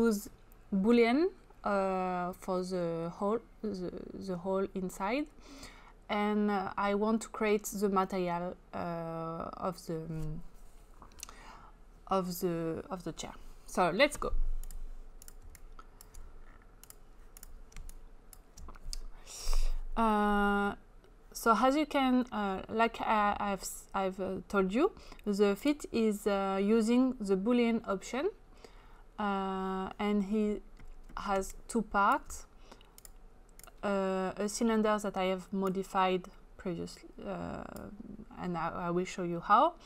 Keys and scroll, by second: 17.8 space, 31.5 space.